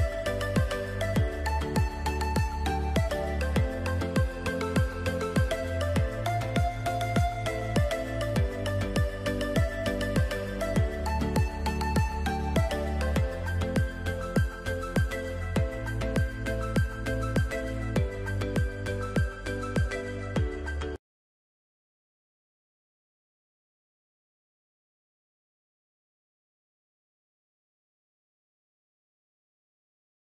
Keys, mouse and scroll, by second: 4.4 right click, 6.1 click, 9.4 alt+scroll down 2, 10.1 click, 10.7-11.1 alt+scroll up 2, 11.3 alt+click, 12.8 shift+click, 13.8 Up, 15.1 click, 16.2 Delete, 17.0-18.3 alt+scroll down 4, 18.5 alt+scroll up 1.